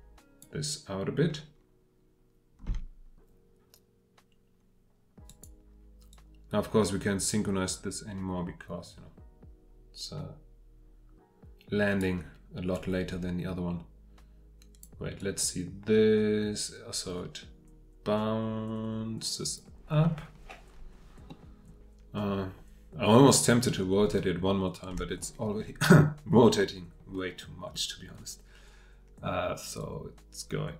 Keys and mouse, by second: 2.7 g, 21.3-30.2 middle drag, 30.2-30.7 drag.